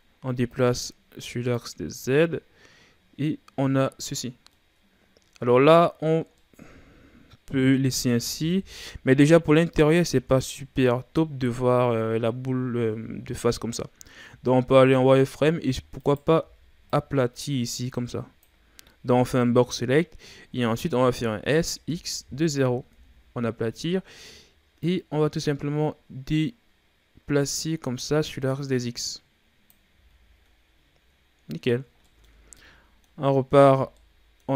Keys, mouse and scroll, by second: 0.5-1.9 drag, 1.9-2.2 scroll down 3, 2.2-4.0 middle drag, 4.0-4.5 scroll up 2, 4.5-8.5 middle drag, 8.5 KP_1, 9.8-10.5 scroll down 5, 10.5-11.4 scroll down 1, 11.4-12.3 scroll down 2, 12.3-13.7 scroll down 1, 13.7-14.3 scroll up 1, 14.3 z, 14.9-16.0 ctrl+scroll up 3, 16.0 right click, 16.4 b, 20.1-21.3 ctrl+scroll up 10, 21.5 s, 24.8-27.8 drag, 29.9 z, 30.4 scroll up 2, 30.6-32.1 scroll down 11, 32.1-33.4 middle drag, 33.4 scroll up 1, 33.6 Tab, 34.0-34.5 middle drag.